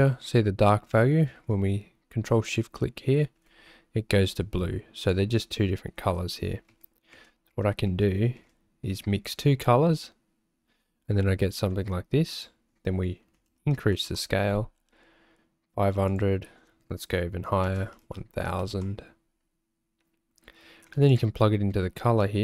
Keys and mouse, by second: 5.1 click, 6.2 ctrl+z, 6.8 ctrl+z, 7.1 ctrl+z, 7.5 ctrl+z, 8.1 ctrl+z, 8.4 ctrl+z, 12.5-14.3 drag, 13.8 KP_0, 16.1-19.0 drag, 18.0 KP_0, 21.4 ctrl+shift+click.